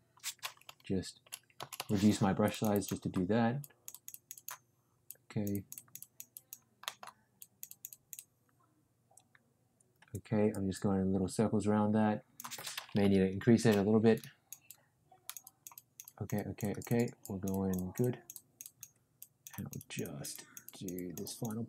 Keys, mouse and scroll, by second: 0.6-1.7 typing, 2.4 click, 2.7 click, 3.5 click, 5.0-6.2 drag, 6.3 click, 6.8 middle click, 7.3 click, 12.9 ], 13.4 ], 13.5 ], 13.6 ], 14.1 click, 14.6 click, 17.6 click, 19.1 click, 19.5 click, 20.6 click, 21.2-21.6 drag.